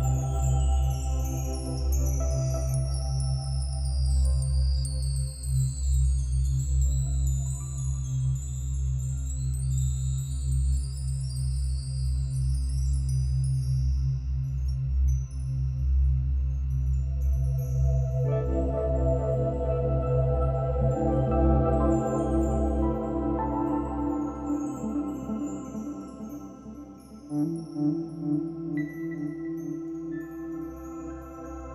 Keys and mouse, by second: 0.8 click, 1.0 click, 3.5 click, 5.7 click, 7.7 click, 11.3-24.8 ctrl+alt+drag, 24.6 ctrl+s, 25.6-27.1 drag, 27.7 click, 29.2 click.